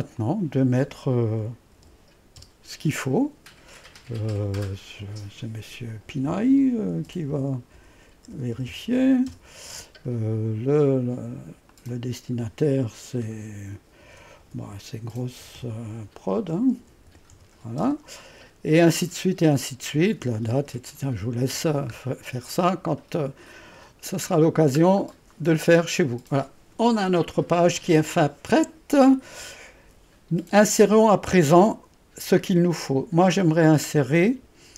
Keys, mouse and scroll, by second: 0.0 click, 3.9-4.6 typing, 4.3 click, 6.8-9.4 typing, 11.7 click, 13.8-17.9 typing, 22.0-23.5 scroll down 1, 23.5-26.5 middle drag, 31.7 click.